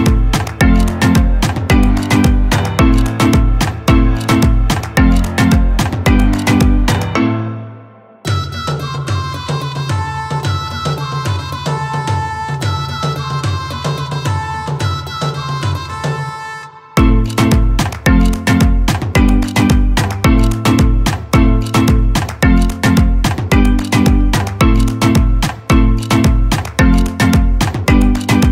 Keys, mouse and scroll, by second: 13.7-21.0 drag, 27.6-28.5 drag.